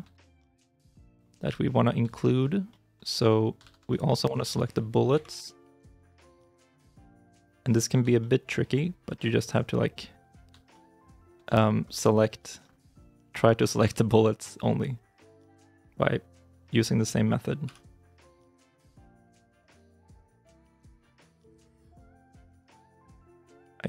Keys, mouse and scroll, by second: 0.2 shift+z, 0.4 scroll up 1, 0.7 middle click, 1.3-1.8 scroll up 1, 2.1 shift+middle click, 3.0 middle click, 3.5 shift+z, 3.8 middle click, 4.1-4.6 scroll down 1, 5.0 KP_3, 5.2 KP_9, 6.3 shift+i, 6.4-6.8 shift+scroll, 6.8-7.7 shift+scroll up 2, 7.9 scroll up 1, 8.1 shift+middle click, 8.5 scroll up 1, 10.6 shift+middle click, 15.3 l, 17.6 l, 21.5 scroll down 1, 22.6 middle click, 23.0 shift+z, 23.1 shift+scroll down 1, 23.2 shift+middle click, 23.5 middle click.